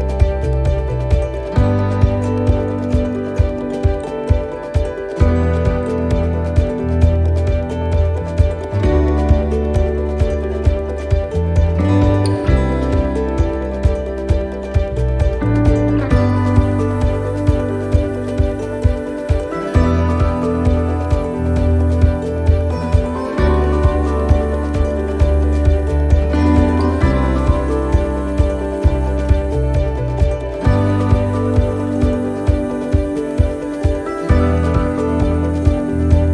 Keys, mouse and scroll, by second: 0.4 click, 2.6 click, 4.4 right click, 5.1 click, 7.4 click, 7.6 right click, 8.4 click, 9.6 right click, 10.3 click, 12.8 right click, 13.2 shift+right click, 14.0 click, 16.4 right click, 16.9 shift+right click, 17.8 s, 20.3 middle click, 20.4-21.2 scroll down 1, 21.2 shift+middle click, 21.7-22.2 scroll down 2, 22.2 middle click, 22.7-23.2 scroll up 1, 23.2 middle click, 23.6-24.0 scroll up 2, 24.2 right click, 24.7 shift+right click, 26.2 shift+right click, 26.3 click, 28.0 right click, 29.1 click, 31.0 click, 31.9 right click, 33.5 click, 35.4 middle click, 35.7-36.1 scroll down 2, 36.1 middle click.